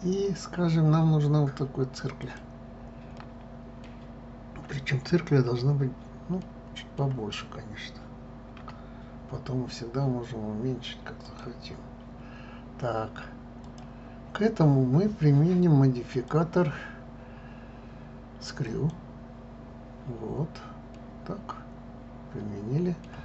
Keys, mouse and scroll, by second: 3.1-6.1 middle drag, 6.4-8.6 middle drag, 8.6 s, 11.7 scroll, 13.6 click, 16.1-20.9 drag, 20.9-23.1 middle drag.